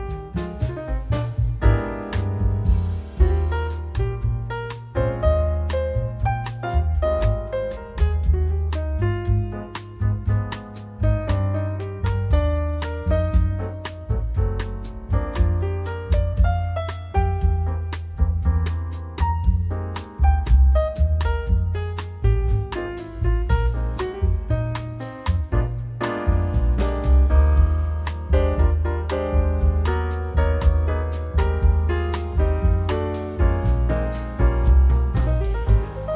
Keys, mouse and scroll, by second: 1.2 scroll down 1, 1.9 scroll up 1, 3.0 click, 7.1 click, 8.3-11.8 drag, 11.9-12.3 scroll down 2, 12.4-12.8 scroll up 2, 13.7-15.1 drag, 15.2 click, 16.6 click, 17.3 scroll down 1, 18.7 click, 19.1 click, 19.6-22.2 drag, 22.3-22.7 scroll up 2, 23.3-23.6 scroll down 2, 23.6 click, 24.9 1, 25.3 2, 26.0 scroll down 2, 26.7 scroll up 1, 29.6 click, 31.3-33.7 drag, 33.9 click, 34.8-36.1 drag.